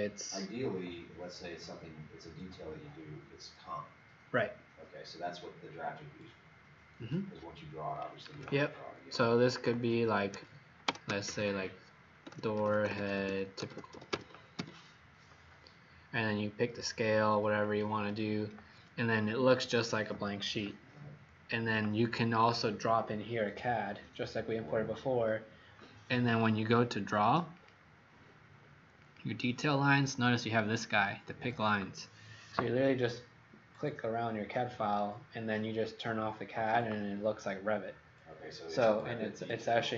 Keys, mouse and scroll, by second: 8.2 d, 10.0-11.2 typing, 12.2-15.0 typing, 17.5 click, 20.8-22.1 scroll down 3, 22.1-27.4 scroll up 1, 27.4 click.